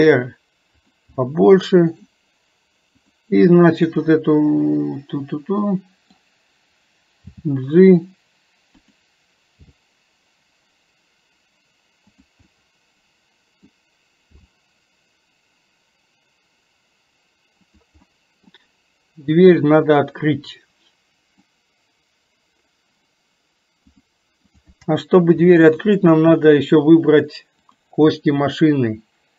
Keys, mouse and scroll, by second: 1.2 middle click, 3.9-6.3 middle drag, 12.6-13.7 middle drag, 13.7 scroll down 1, 18.2 middle click, 20.1-21.6 middle drag, 21.6 scroll down 1, 24.0-24.8 drag, 25.9 shift+click, 27.8-29.3 drag.